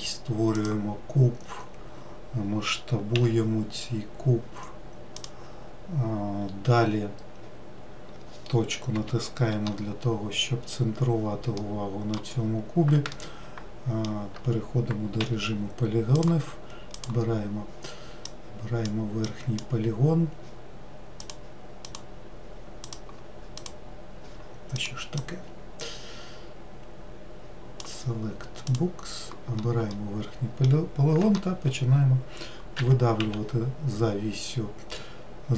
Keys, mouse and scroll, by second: 3.1 s, 6.9-8.9 scroll up 1, 8.9 KP_Decimal, 10.7-11.5 scroll down 8, 11.5 middle click, 12.3-13.1 scroll down 4, 13.1-15.2 shift+middle drag, 15.2 3, 16.2-28.2 drag, 28.6 click, 29.9-32.8 middle drag, 32.8 e.